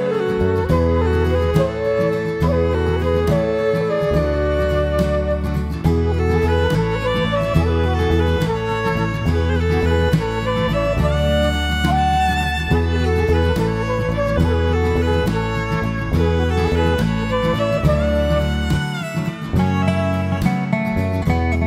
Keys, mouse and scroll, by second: 0.2 click, 2.8 click, 5.2 click, 6.3-7.8 scroll down 3, 7.8 click, 8.6-9.0 scroll down 3, 9.0 middle click, 10.0-10.8 scroll up 4, 11.8 click, 14.2 shift+f, 16.1 click, 17.6 click, 19.0 click, 20.0 click, 21.2 click.